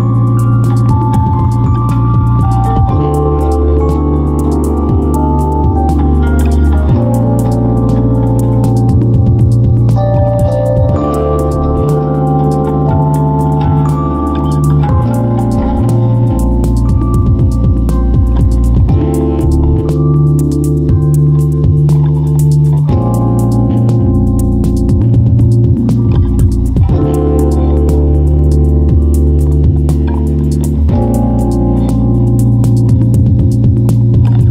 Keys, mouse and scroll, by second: 5.5 m, 32.2 m.